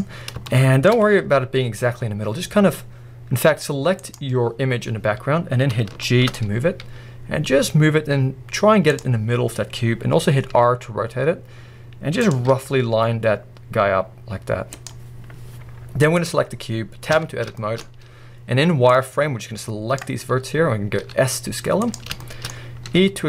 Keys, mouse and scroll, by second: 0.1 scroll, 0.6-4.1 shift+middle drag, 1.0 scroll, 2.0 scroll up 1, 2.1 scroll, 2.7-3.4 scroll up 1, 3.4-4.1 scroll up 1, 4.1 click, 4.4-5.2 scroll down 1, 5.2 scroll up 1, 6.1-6.6 shift+middle drag, 6.8 g, 8.9 click, 9.2 middle click, 9.2 scroll, 10.5 r, 12.5 g, 13.0 click, 14.1 click, 14.3 click, 15.4 scroll up 1, 15.6 middle click, 15.6-16.2 scroll, 16.2 click, 16.5 scroll down 1, 17.1 Tab, 17.6 shift+middle click, 17.8 scroll up 1, 20.0 click, 20.2-21.0 scroll up 1, 21.0 scroll up 1, 21.0 s, 22.2 shift+middle click, 22.9 e.